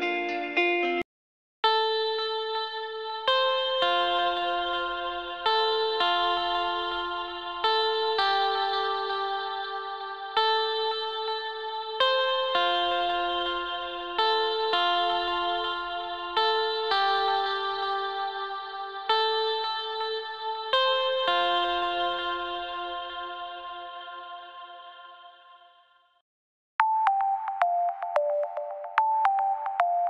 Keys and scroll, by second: 0.5 s, 24.6 s.